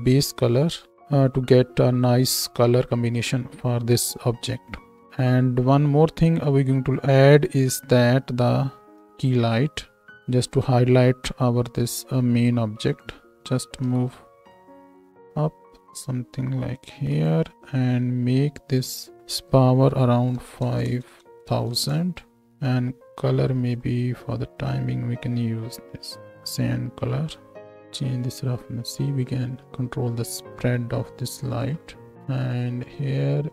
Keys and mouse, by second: 0.0-13.4 middle drag, 10.2 shift+a, 13.4 shift+a, 13.4 z, 13.8 g, 18.7-22.5 drag, 20.8 KP_0, 27.5-33.1 drag, 33.1-33.5 middle drag.